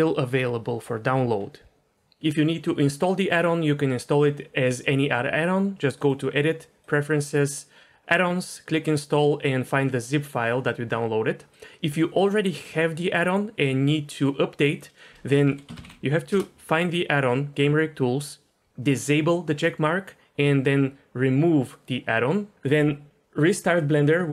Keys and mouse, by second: 6.0-7.0 drag.